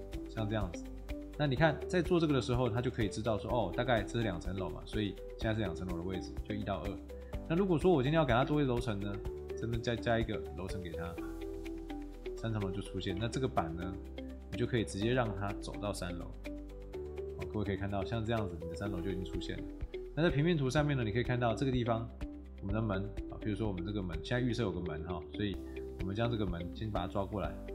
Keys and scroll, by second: 3.1 Tab, 5.4 Escape, 12.3 Escape, 13.1 Tab.